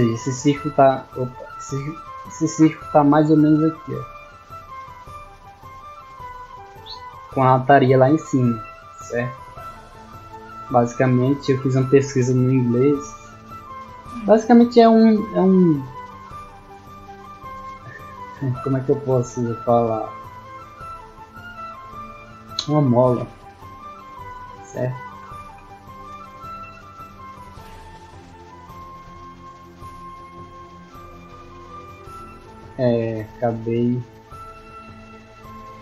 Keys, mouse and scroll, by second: 0.3 d, 4.9-5.6 drag, 6.1-11.9 drag, 25.7 right click, 27.3 click, 30.4 click, 32.2 middle click, 33.1 d, 33.3 right click, 34.0-35.8 right drag, 34.4 middle click, 34.4-35.3 scroll down 1, 35.3 scroll down 1.